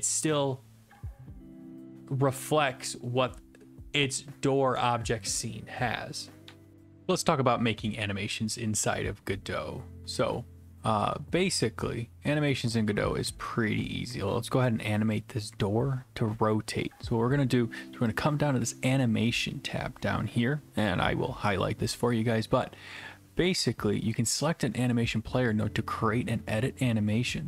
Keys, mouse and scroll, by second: 0.0-1.0 drag, 6.4 Delete, 18.2 click.